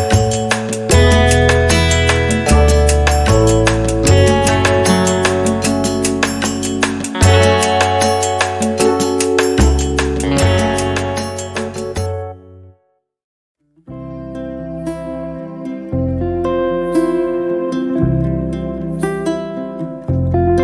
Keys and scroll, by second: 3.2 p, 5.0 0, 5.3 0, 5.6 Return, 6.2 space, 9.9 p, 11.6 0, 11.9 Return, 12.6 space, 15.3 m, 18.2 m, 18.3 space.